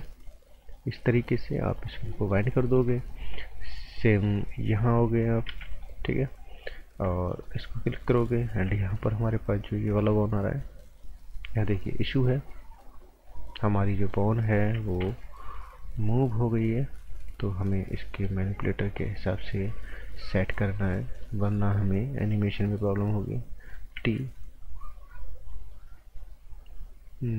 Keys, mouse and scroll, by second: 0.6 click, 2.1 right click, 2.4 scroll down 1, 2.6 right click, 3.2 scroll up 1, 3.4 right click, 5.5 b, 5.7 click, 6.6 scroll up 1, 7.4 alt+right click, 11.4 scroll up 1, 11.7 right click, 15.0 t, 17.1 scroll up 1, 17.7 scroll down 1, 18.0 right click, 20.9 scroll up 1, 21.2 right click, 22.3 typing, 24.0 typing.